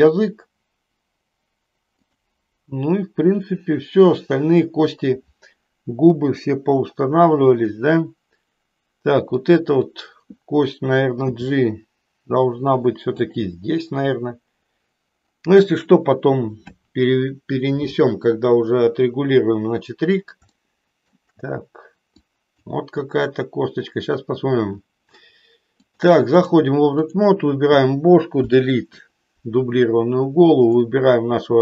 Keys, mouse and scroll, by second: 9.3 click, 11.3 g, 13.3 click, 20.6 shift+middle click, 22.3 click, 25.6 click, 26.9 click, 28.4 Delete.